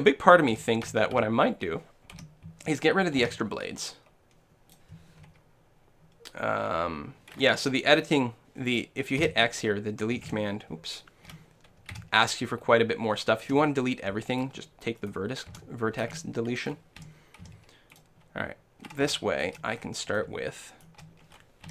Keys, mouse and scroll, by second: 0.6 a, 0.9 a, 1.2 a, 2.2 l, 3.2 x, 8.7-10.5 right drag, 9.2 x, 11.3 l, 11.9 x, 13.5 x, 15.0-16.8 right drag, 16.1 x, 17.1 l, 17.4 x, 18.7 x, 19.2-21.7 middle drag.